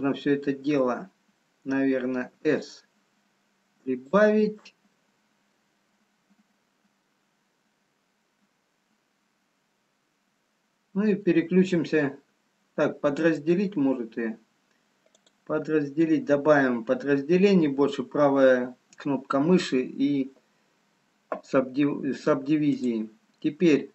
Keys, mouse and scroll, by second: 5.1 s, 6.7 middle click, 15.3 right click, 22.8 click.